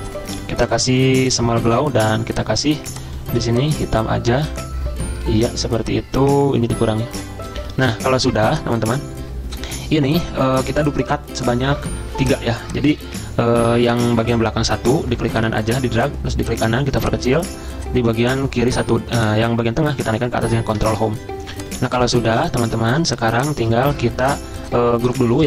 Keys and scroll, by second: 13.2 ctrl+z, 20.8 ctrl+Home.